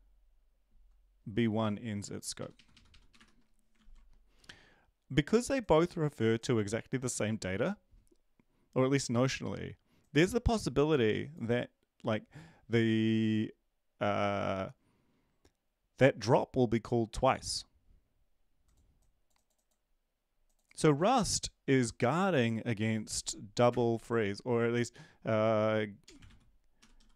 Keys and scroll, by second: 2.3 Right, 2.5 Right, 2.7 Right, 3.1 Delete, 3.7 ctrl+s, 26.7-27.1 typing.